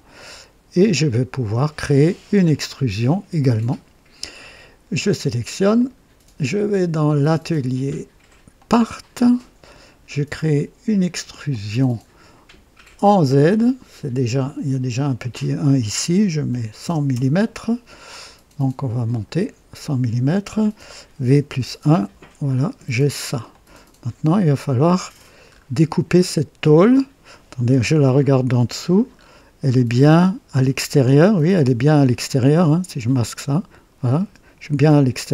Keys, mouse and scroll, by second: 0.1-1.3 drag, 5.7 click, 7.0 click, 8.5 click, 11.4 click, 16.4 KP_1, 16.7 KP_0, 17.0 KP_0, 19.0 click, 19.3 typing, 21.3 typing, 23.5-25.3 drag, 25.5 scroll up 1, 26.8 scroll down 1, 27.7 typing, 28.5 right click, 29.1 scroll up 1, 29.9-30.2 scroll up 1, 31.3 right click, 32.5 click, 32.8 typing, 34.1 typing, 35.2 right click.